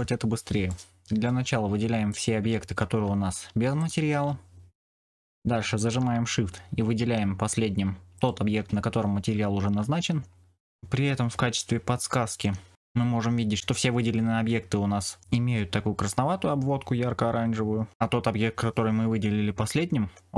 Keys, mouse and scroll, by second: 0.6 middle click, 2.0 click, 8.1 shift+click.